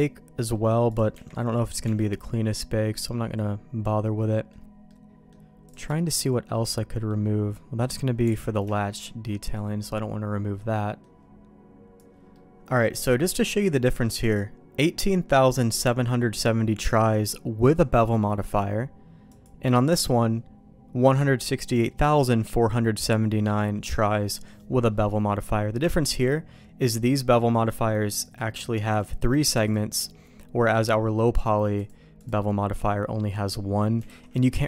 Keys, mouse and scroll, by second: 0.5 middle click, 0.8 click, 1.1 Tab, 1.8 Tab, 2.9-4.5 middle drag, 4.8 middle click, 5.6 click, 5.9 shift+middle click, 6.5 middle click, 8.6 alt+shift+a, 8.7 middle click, 9.2-11.0 middle drag, 12.3-13.5 middle drag, 13.8 middle click, 19.2 click, 19.9 click, 26.8-28.3 drag, 28.9 click, 31.7-33.0 drag, 34.0 alt+a.